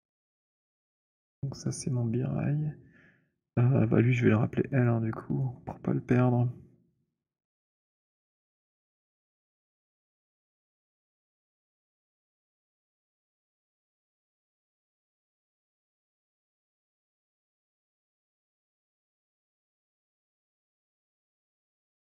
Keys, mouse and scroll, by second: 1.3 click, 3.5 middle click, 3.7 middle click, 4.0 middle click, 4.5 middle click, 5.0 alt+click, 5.5 alt+right click, 7.5 click, 8.4-13.7 typing, 8.7 alt+click, 16.4 click, 19.9 alt+click, 20.1 click.